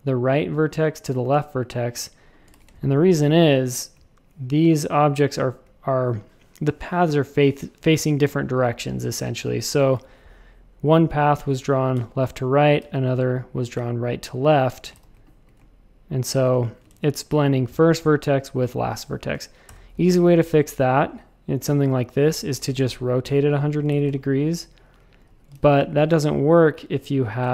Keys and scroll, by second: 2.5 shift+super+a, 2.6 space, 9.9 \, 12.8 shift+super+a, 14.8 shift+super+a, 16.3 alt+super+b, 16.9 shift+super+a, 18.7 a, 19.6 BackSpace, 22.5 r, 23.9 shift+super+a, 24.0 space, 25.2 super+z, 25.5 shift+super+a, 26.1 shift+c.